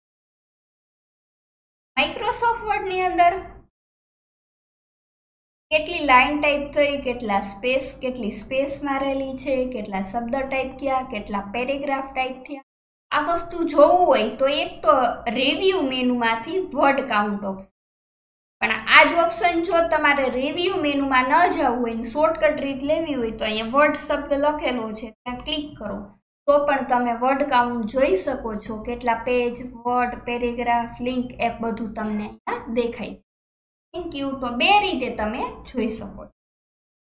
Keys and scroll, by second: 0.0 alt+KP_1, 36.9 alt+KP_1.